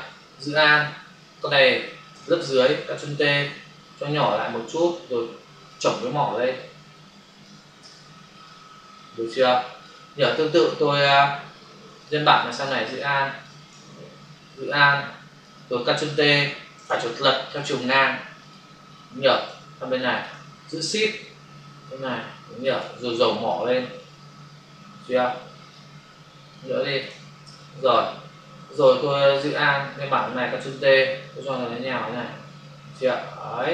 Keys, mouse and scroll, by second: 0.6 alt+click, 4.1 shift+click, 5.9 click, 7.8 Return, 8.4 click, 11.9 ctrl+click, 12.0 ctrl+click, 12.6 shift+click, 13.7 ctrl+z, 14.6 alt+click, 16.6 right click, 16.8 right click, 18.4 click, 18.5 click, 19.4 click, 23.0 click, 23.9 click, 26.4 shift+click, 27.5 Return, 27.9 click, 29.2 alt+click, 31.2 click.